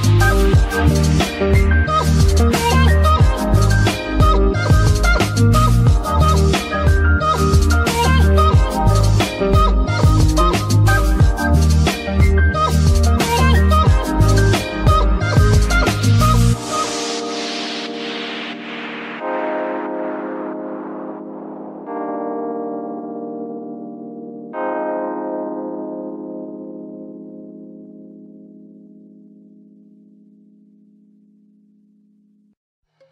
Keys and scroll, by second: 13.2 g, 14.9 Escape, 31.8 g.